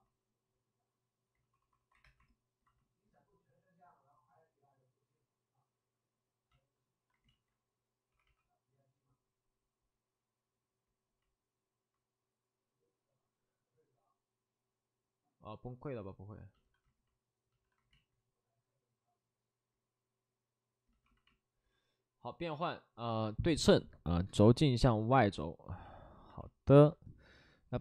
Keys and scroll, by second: 1.3 ctrl+d, 1.5 ctrl+d, 2.0 ctrl+d, 2.0 2, 6.5 shift+f, 7.2 ctrl+z, 7.2 shift+f, 8.0 2, 12.3 2, 16.6 shift+f, 17.5 shift+f, 17.9 ctrl+z.